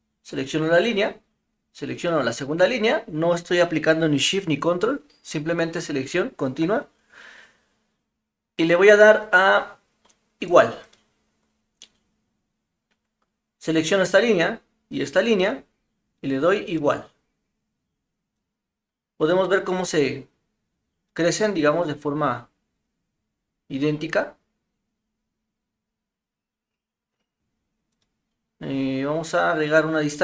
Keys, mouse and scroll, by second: 0.3 click, 1.9 click, 10.9 click, 14.9 click, 16.6 click, 18.4-21.1 drag, 21.9-27.4 drag, 30.1 click.